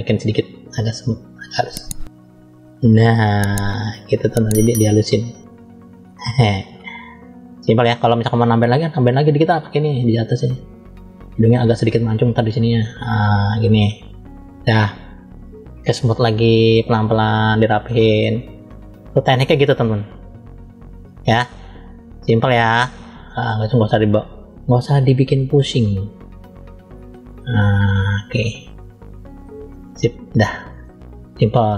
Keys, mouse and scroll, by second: 0.2 click, 7.1 click, 8.8 click, 9.8 click, 11.3 click, 12.0 click, 12.3 click, 13.3 click, 15.6 click, 16.5 click, 28.5 click, 30.7 middle click.